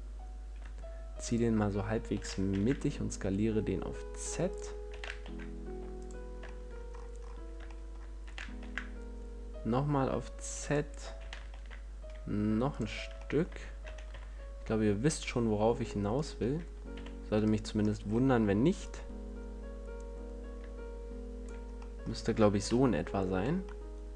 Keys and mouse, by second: 1.6-3.5 drag, 2.5 s, 4.9-8.0 drag, 5.2 s, 8.8 s, 11.0-13.0 drag, 13.0 middle click, 13.1 click, 13.5-16.5 middle drag, 16.5-17.9 drag, 17.2 z, 17.9 middle click, 18.1 click, 18.3-22.1 middle drag, 22.9 KP_Decimal.